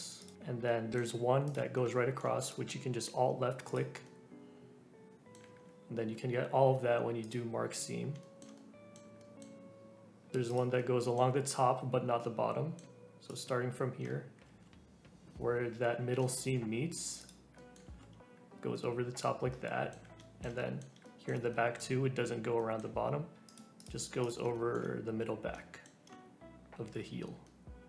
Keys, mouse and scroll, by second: 0.2 click, 0.3-0.6 scroll down 1, 0.6 middle click, 1.5 alt+click, 1.9 shift+middle click, 2.5 click, 4.1-5.6 middle drag, 5.6-7.3 scroll up 1, 7.3 q, 7.8 click, 8.2-10.5 shift+middle drag, 10.5 click, 10.7-13.3 middle drag, 13.3 click, 14.4 alt+z, 16.2-17.2 shift+middle drag, 17.2 click, 17.5 middle click, 17.8 alt+z, 18.8 middle click, 19.1-23.5 middle drag, 23.5 click, 23.8 click, 24.2 click, 24.5-26.8 shift+middle drag, 26.8 scroll down 3, 27.4 middle click.